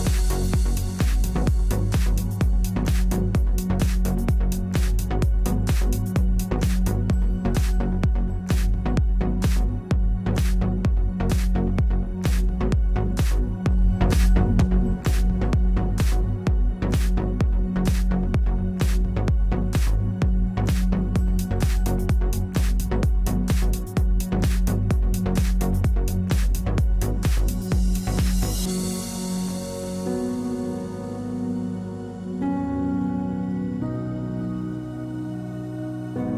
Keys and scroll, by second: 1.0-2.8 typing, 3.6 Return, 5.5 1, 7.3 2, 8.4 Return, 35.7-36.3 typing.